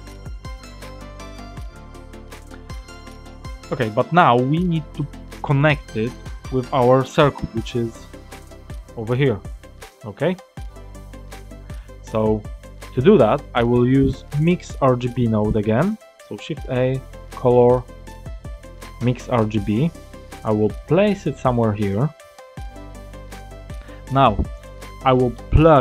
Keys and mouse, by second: 2.6 click, 4.0 click, 5.0 click, 7.9 ctrl+shift+click, 10.2 click, 11.0 ctrl+shift+click, 12.1 click, 16.1 shift+a, 22.7 click, 25.1 middle click.